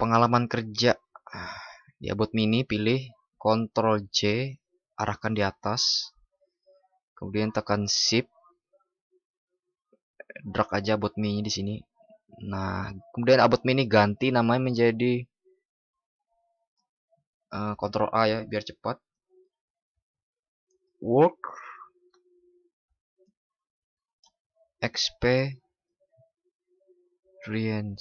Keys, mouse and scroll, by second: 3.9 ctrl+shift+i, 7.2 ctrl+?, 17.6 ctrl+shift+@.